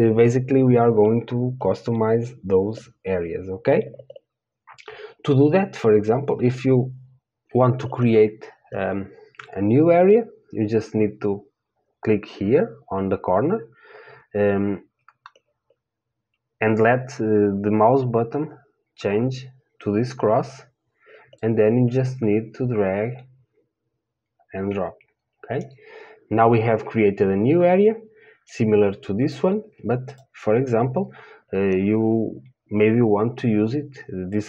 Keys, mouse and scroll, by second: 22.8 click, 29.6-34.4 drag.